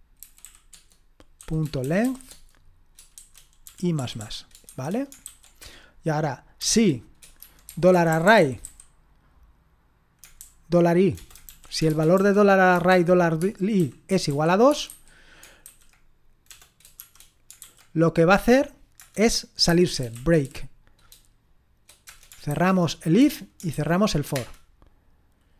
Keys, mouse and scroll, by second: 0.0-9.2 typing, 10.4-17.6 typing, 19.0 Return, 19.4-20.9 typing, 22.0 Return, 22.5 }, 23.2 Return, 23.7 }, 24.3 Return.